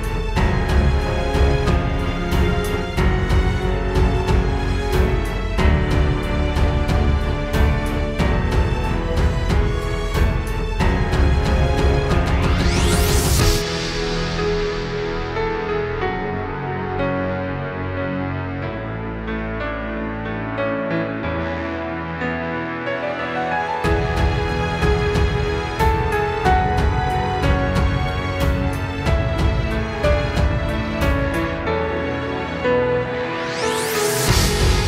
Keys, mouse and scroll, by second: 0.1 click, 0.6 click, 0.7 click, 0.9 click, 1.4 click, 1.7 click, 2.2-3.9 scroll down 1, 3.9 click, 3.9-4.5 scroll down 1, 4.6-5.7 scroll up 3, 5.0 middle click, 6.0 shift+middle click, 6.3 scroll up 1, 6.5 middle click, 9.1 click, 13.0 click, 15.1 click, 19.5 click, 25.7 click, 26.2 click, 26.6 click, 27.4 click, 27.8 click, 30.5 click, 33.8 click, 34.3 click.